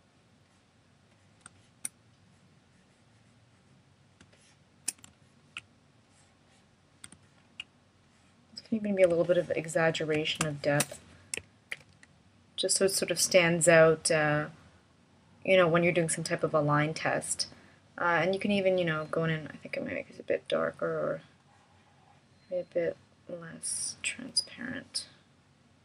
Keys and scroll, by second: 11.7 shift+m.